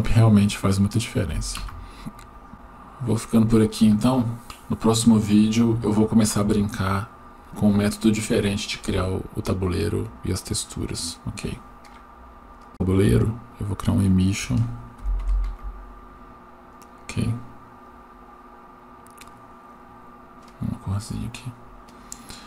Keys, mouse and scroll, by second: 14.4-15.6 drag, 17.8 click.